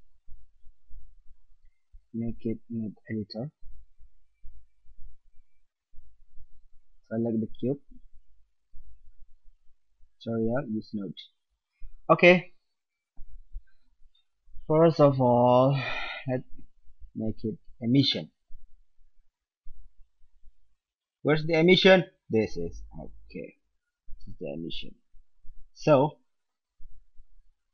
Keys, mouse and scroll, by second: 0.4-2.4 drag, 5.5-7.3 drag, 7.6-12.4 drag, 16.1-17.9 drag, 24.6-26.0 right drag, 26.0-26.6 drag, 27.6-27.7 drag.